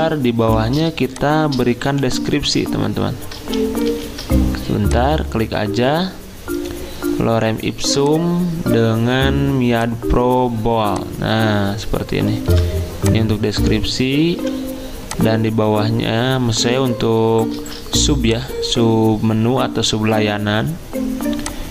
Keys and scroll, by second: 1.9 t, 3.5 ctrl+z, 3.9 ctrl+z, 12.5 v, 14.3 t, 17.6 ctrl+z.